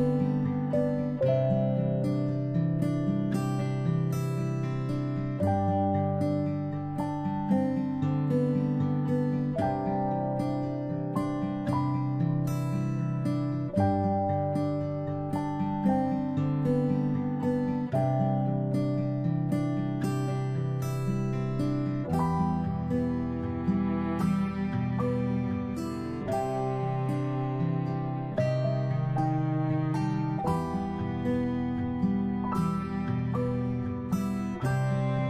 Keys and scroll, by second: 16.3 ctrl+shift+], 16.8 ctrl+shift+[, 22.7 ctrl+[, 22.9 ctrl+[, 23.1-27.3 ctrl+[, 27.3 ctrl+], 31.9 ctrl+z.